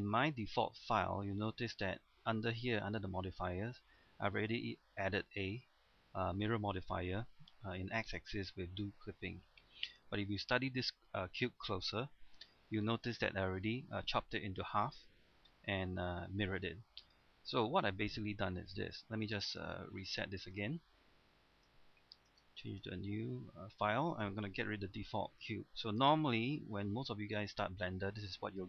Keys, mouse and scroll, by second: 10.5 middle click, 11.1-11.5 scroll up 1, 11.5 middle click, 12.4 Tab, 12.8 middle click, 13.2 scroll up 1, 13.6 middle click, 14.4-15.4 scroll down 1, 15.4-16.8 middle drag, 19.5 click, 23.8-24.9 scroll up 1, 24.9 x, 25.4 click, 26.0 space.